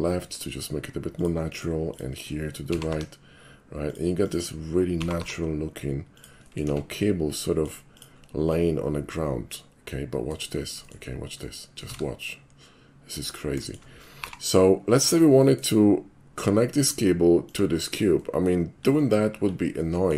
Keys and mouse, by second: 1.2 click, 1.6 middle click, 1.9 click, 2.7 g, 2.9 y, 3.9 click, 4.3 click, 5.0 g, 5.2 y, 6.2 click, 6.4 middle click, 6.7 Tab, 7.4 middle drag, 7.9 click, 8.5-10.3 middle drag, 10.6 shift+middle drag, 10.9 shift+middle click, 11.4 shift+middle click, 11.9 shift+a, 13.3 click, 13.7 shift+middle click, 14.3 g, 15.0 click, 15.5 middle click, 15.8 middle drag, 16.8 click, 17.5 click, 18.2 middle click, 18.8-19.2 middle drag, 19.8-20.1 middle drag.